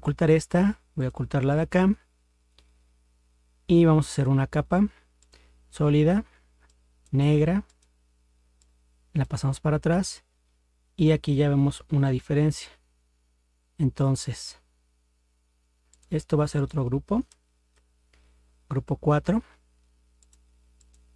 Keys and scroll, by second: 17.7 ctrl+g.